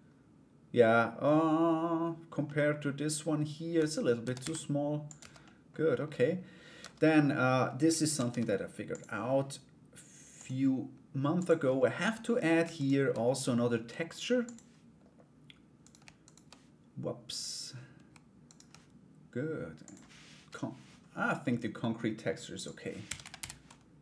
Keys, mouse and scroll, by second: 2.0 middle click, 3.3 Tab, 3.8 a, 4.0 s, 4.8 Tab, 5.0 middle click, 6.6 Tab, 6.6 middle click, 7.7 ctrl+r, 10.9 click, 12.3 alt+right click, 14.0 click, 15.4 right click, 15.8 alt+right click, 16.9 click, 18.0 alt+right click, 22.1 click, 22.9 typing.